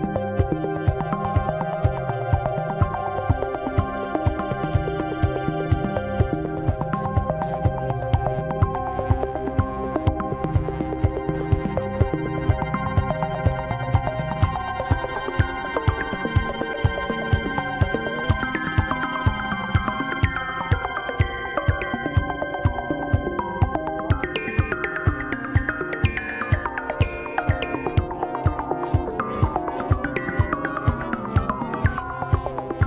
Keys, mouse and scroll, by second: 0.9 shift+a, 4.5 r, 9.9 click, 10.7 click, 12.6 m, 14.5 click, 15.1 click, 15.7 Tab, 18.3 m, 20.2-20.9 scroll up 2, 20.9-22.4 shift+middle drag, 22.4 g, 26.1-26.5 scroll up 6, 26.8-27.8 shift+middle drag, 27.8-28.4 scroll up 4, 29.9 g, 32.6 scroll down 1.